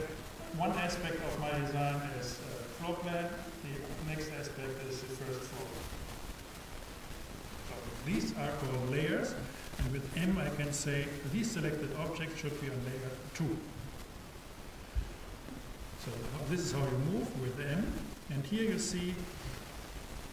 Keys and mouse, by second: 9.9 m.